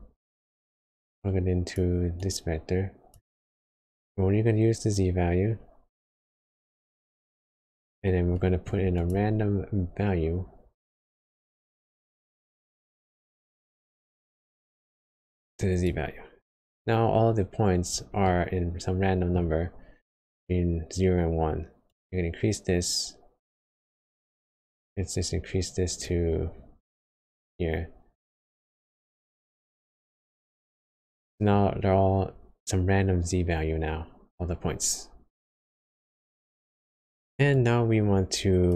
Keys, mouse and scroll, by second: 0.6 click, 7.9-8.3 scroll down 4, 8.3 middle click, 8.7-9.1 scroll up 3, 9.0 click, 9.4 shift+a, 14.5 click, 18.2 middle click, 19.6 scroll up 1, 21.2 scroll up 1, 21.8 click, 26.5 scroll down 2, 27.4 middle click, 27.4 scroll down 2, 29.6 click, 31.0 middle click, 35.4 click.